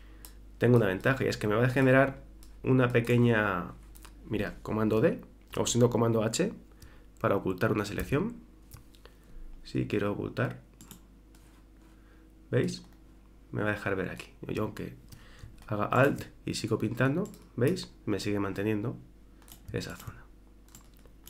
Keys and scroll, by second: 8.0 super+h.